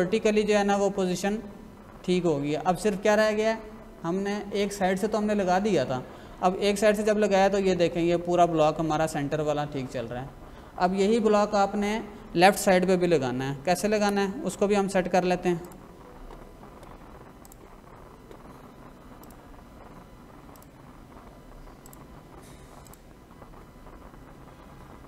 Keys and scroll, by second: 14.0 Escape.